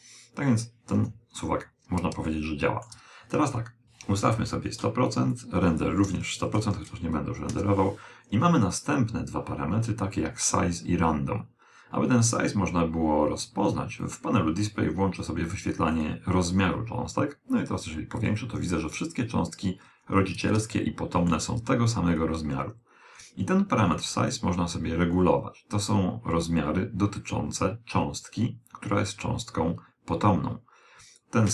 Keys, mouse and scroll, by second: 0.9 KP_1, 2.2-3.8 middle drag, 3.8-7.0 drag, 4.5 0, 6.6 0, 14.0 click, 15.8 click, 17.5-22.5 middle drag, 24.2 click.